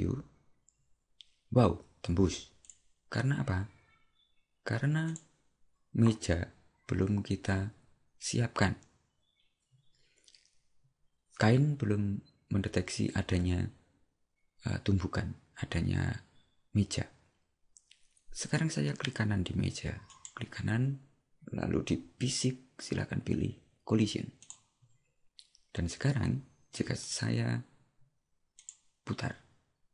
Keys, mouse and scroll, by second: 20.2 right click, 24.5 click.